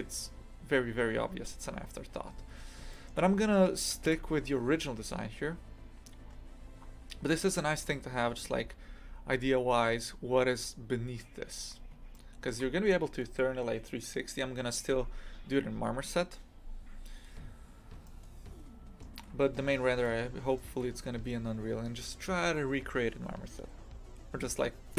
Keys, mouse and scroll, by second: 2.0 scroll down 2, 2.9-4.1 middle drag, 4.1 KP_3, 5.8-6.8 scroll up 5, 6.8-8.0 scroll down 2, 11.5 scroll up 1, 12.1-17.2 shift+middle drag, 17.2-18.0 scroll up 2, 18.0-24.9 shift+middle drag.